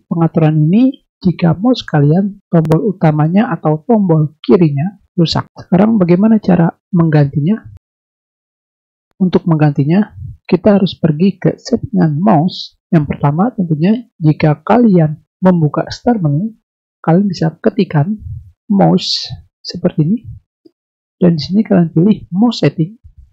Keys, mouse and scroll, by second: 14.3 click, 18.7 u, 22.8 click.